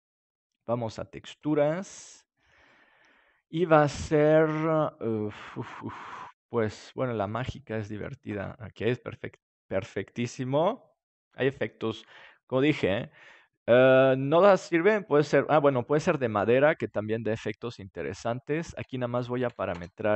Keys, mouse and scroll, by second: 1.4-3.0 drag, 3.4-5.0 drag, 16.9-19.0 middle drag, 19.0-20.1 drag.